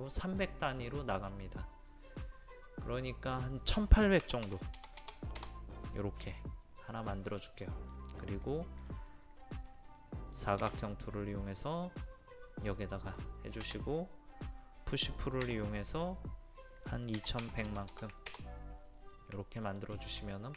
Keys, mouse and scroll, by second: 0.2-1.3 drag, 4.2 KP_1, 4.4 KP_8, 4.7 KP_0, 5.4 KP_0, 6.4-11.3 middle drag, 11.5 click, 13.2-14.3 middle drag, 14.3 click, 15.4 p, 15.8 click, 17.1 KP_2, 17.4 KP_1, 17.6 KP_0, 19.1 middle click, 20.0 shift+middle click.